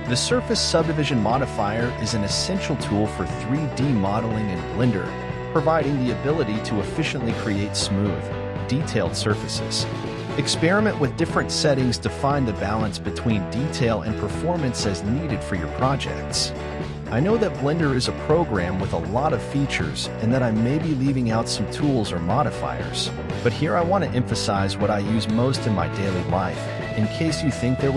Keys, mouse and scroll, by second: 0.4-1.4 scroll up 4, 3.6-19.3 drag, 19.3-20.3 scroll down 8, 20.3-21.3 scroll down 6, 21.3-27.6 middle drag, 27.6-27.9 drag.